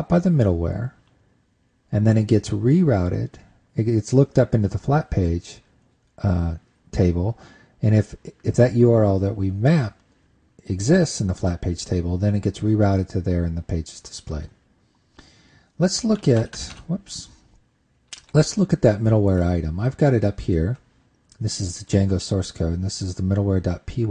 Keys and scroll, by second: 15.9 super+Tab, 16.9 super+Tab, 17.1 super+Tab, 17.3 super+Tab, 18.8 super+`.